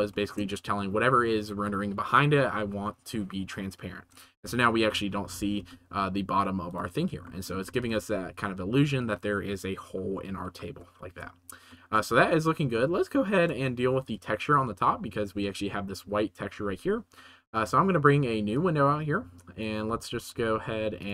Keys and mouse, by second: 5.3 g, 5.5 z, 7.2 shift+middle drag, 7.7 ctrl+s, 11.7-12.1 shift+middle drag, 12.1 ctrl+s, 12.8-13.4 middle drag, 14.0 click, 18.5-19.5 middle drag, 19.8 t, 20.1 t.